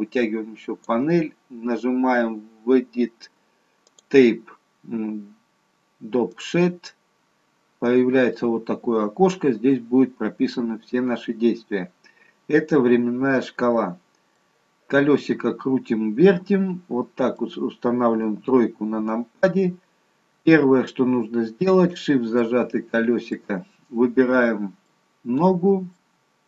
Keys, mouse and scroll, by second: 3.8 click, 11.7-12.9 scroll up 1, 14.3 middle click, 14.3-14.8 scroll up 1, 18.2 KP_3, 20.6-22.4 scroll up 2, 22.4 shift+middle click, 24.8 middle click.